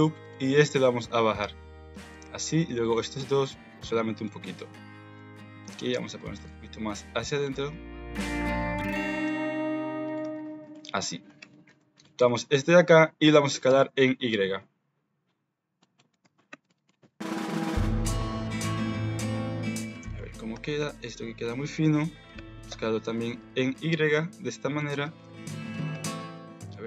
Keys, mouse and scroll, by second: 0.2 click, 0.6 g, 2.1 alt+z, 2.5 click, 2.9 alt+z, 3.1 g, 4.6 alt+a, 5.1 alt+z, 5.3 click, 5.7 g, 6.4 alt+z, 7.1 click, 7.5 g, 8.4 alt+z, 8.7 click, 9.0 alt+z, 9.2 g, 10.2 Tab, 10.7 shift+click, 11.1 click, 11.3 Tab, 12.3 middle click, 13.3 s, 16.2 alt+z, 16.6 Tab, 16.6 middle click, 17.2 KP_1, 18.1 Tab, 18.8 alt+z, 18.8 middle click, 19.1 Tab, 19.7 middle click, 20.1 shift+middle click, 20.5 Tab, 21.1 alt+z, 21.5 click, 22.3 s, 25.0 Tab, 25.3 alt+z, 25.7 middle click, 25.9 Tab, 26.3 alt+z.